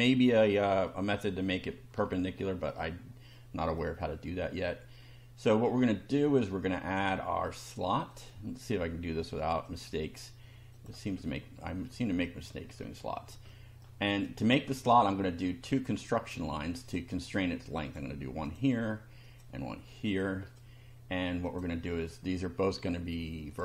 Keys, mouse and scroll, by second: 0.8 middle click, 2.0 shift+middle click, 3.3 middle click, 4.5 scroll up 2, 5.6 middle click, 8.1 click, 9.7 click, 10.8 click, 11.2-12.0 scroll up 2, 12.2 shift+middle click, 13.4 shift+middle click, 14.1 shift+right click, 15.8 click, 16.9 click, 17.8 click, 18.4 click, 19.3 click, 20.1 click, 20.5 right click, 21.4 click, 23.5 click.